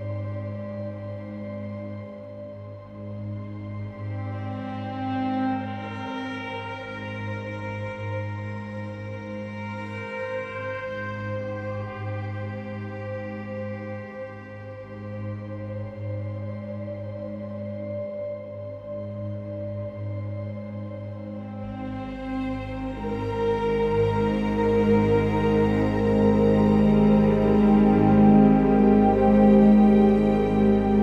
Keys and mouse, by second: 5.0 KP_3, 6.5 Tab, 8.4 ctrl+KP_Add, 8.6 ctrl+KP_Add, 8.6 ctrl+KP_Add, 8.9 ctrl+KP_Add, 10.3-11.7 ctrl+KP_Add, 15.7 shift+click, 17.9-19.0 ctrl+KP_Add, 20.1 g, 20.4 z, 22.1 click, 22.7 s, 23.1 y, 25.1 click, 25.5 Tab.